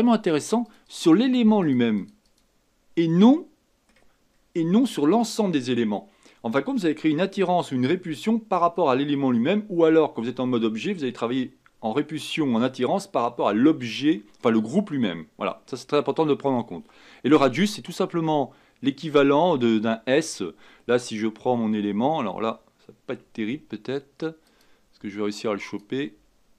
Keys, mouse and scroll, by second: 3.3 middle click, 4.0 scroll up 1, 4.1 scroll down 2, 4.3-7.3 scroll up 1, 17.9-20.6 drag, 20.6-23.5 scroll down 1, 23.5 Tab, 24.4 click, 25.6 click, 26.1 Tab.